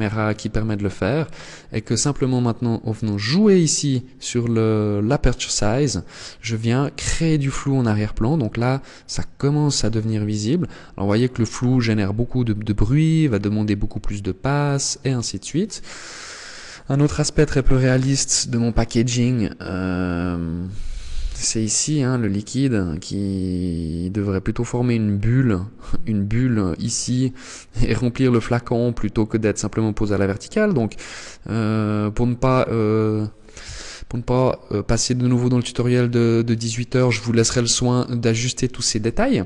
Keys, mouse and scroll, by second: 1.2 click.